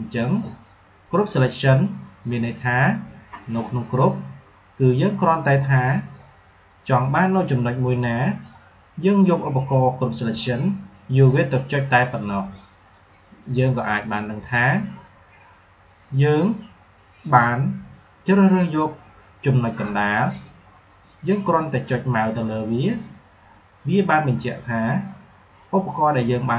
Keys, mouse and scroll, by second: 20.1 click.